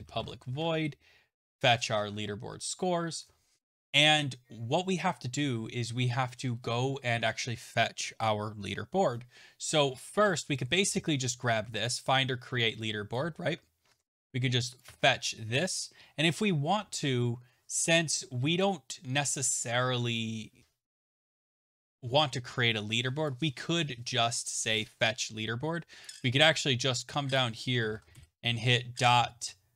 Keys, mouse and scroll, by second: 19.1 click.